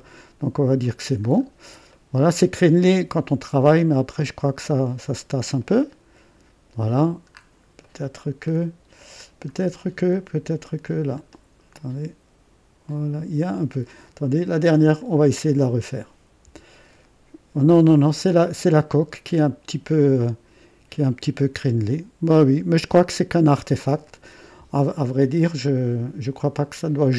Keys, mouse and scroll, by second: 1.0 scroll down 1, 1.3 scroll up 1, 1.9 right click, 2.9-5.5 drag, 5.6-6.9 right drag, 7.3 scroll up 1, 7.8 right click, 8.5 scroll up 1, 9.5-9.8 scroll down 1, 11.1 middle click, 11.7-13.9 drag, 14.9 click, 16.4 Delete, 18.1 click, 20.2-24.4 drag, 25.4 click.